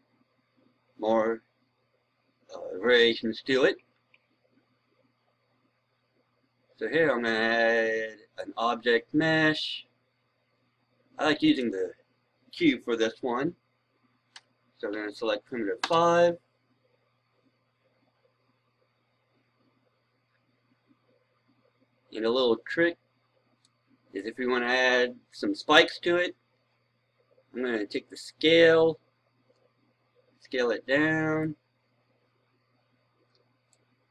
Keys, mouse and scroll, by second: 0.7-1.8 scroll down 1, 2.0-2.6 scroll up 1, 2.6 scroll down 1, 3.3 scroll up 1, 4.7 scroll down 1, 6.8 scroll down 1, 7.1 click, 14.2 KP_5, 23.5-34.1 drag.